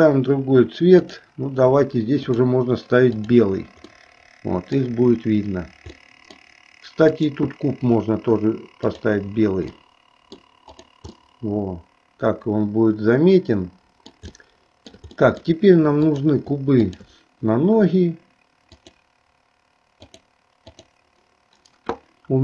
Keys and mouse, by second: 1.1-2.6 drag, 3.3 click, 4.2 middle click, 6.0 middle click, 7.3 click, 8.8 click, 10.0 middle click, 10.9 click, 11.4-14.3 middle drag, 14.5 shift+middle click, 15.4 middle click, 16.2 click, 17.0 shift+click, 18.7-20.4 drag, 20.9 click.